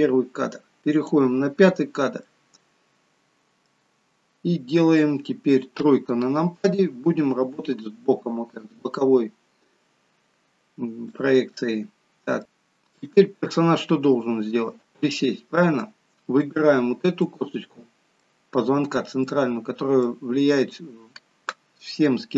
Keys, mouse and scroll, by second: 2.2 middle click, 5.7 KP_3, 9.6 scroll down 1, 11.1 shift+middle click, 14.8-15.2 scroll up 2, 15.2 middle click, 16.4 click, 17.3 middle click, 19.2 middle click.